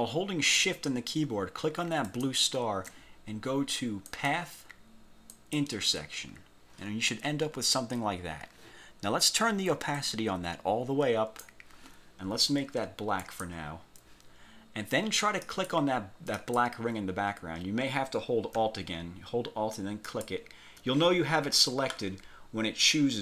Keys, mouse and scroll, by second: 2.2 shift+click, 4.2 click, 5.4 click, 10.0-11.7 drag, 13.3 click, 15.5 click, 16.4 click, 20.2 alt+click.